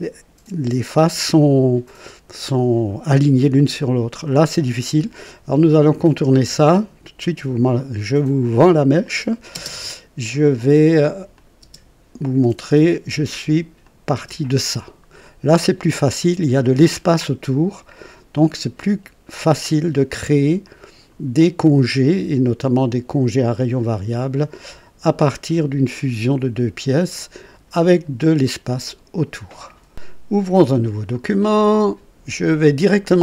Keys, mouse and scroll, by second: 1.9-3.0 drag, 4.2 click, 9.0 click, 9.5 space, 11.3 click, 11.6 typing, 13.8 click, 14.2 typing, 15.2 click, 17.8 click, 20.6 click, 22.1 typing, 23.3 typing, 27.1 click, 31.4 click.